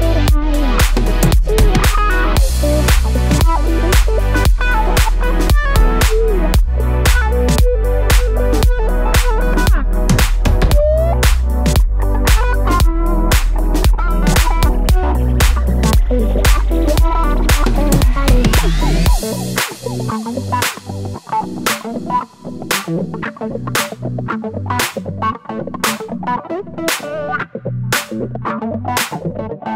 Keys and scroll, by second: 2.0 7, 2.1 Return, 10.2 super+z, 15.1 5, 15.2 Return, 19.8-20.5 typing, 22.5 BackSpace, 22.7 BackSpace, 22.8 Left, 25.4 super+Down, 25.5 super+Down, 29.0 Left, 29.1 Left, 29.2 Left, 29.4 Left, 29.6 Down.